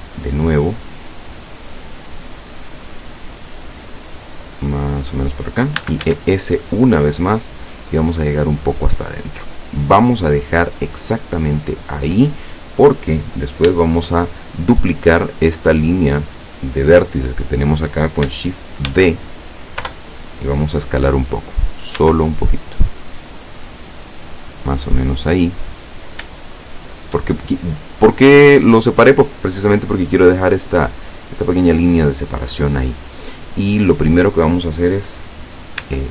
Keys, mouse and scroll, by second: 5.3 click, 5.8 e, 6.1 s, 9.1 click, 18.9 shift+d, 19.9 Return, 22.1 s, 24.6 click, 25.2-26.2 scroll up 6, 26.6-28.3 shift+middle drag, 35.9 e.